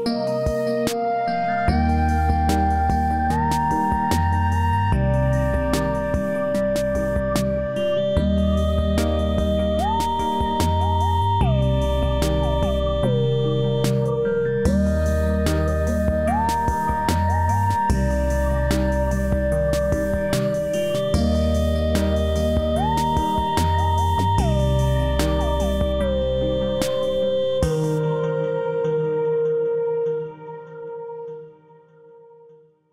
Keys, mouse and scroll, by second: 0.0-0.6 click, 7.8 h, 9.0 click, 14.3 click, 18.8 g, 29.9-31.6 scroll down 1, 32.0 click.